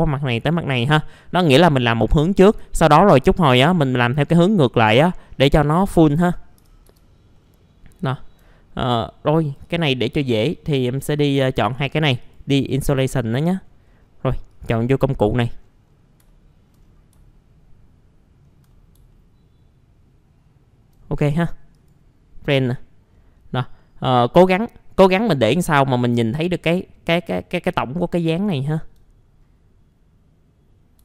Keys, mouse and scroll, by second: 1.9 scroll down 1, 2.7 alt+middle click, 3.2-5.0 scroll up 1, 5.0 scroll down 1, 5.7 middle click, 6.0-6.3 scroll down 1, 6.3 middle click, 6.6 typing, 7.3 middle click, 7.4-8.1 scroll down 1, 8.4 alt+middle click, 8.9 right click, 9.4 click, 10.0 middle click, 10.1-10.5 scroll down 1, 10.7 click, 11.3 right click, 12.2 click, 13.0 scroll up 1, 14.5 click, 15.2 middle click, 15.3-16.2 scroll down 1, 16.3 alt+middle click, 16.8-17.1 scroll down 1, 18.7 middle click, 19.1 alt+middle click, 21.7 click, 22.8-23.1 scroll up 1, 23.1 middle click, 23.3-23.8 scroll down 1, 23.8 middle click, 24.1-24.6 scroll up 1, 24.6-26.5 scroll down 1, 28.6 alt+middle click, 29.2-31.0 scroll up 1.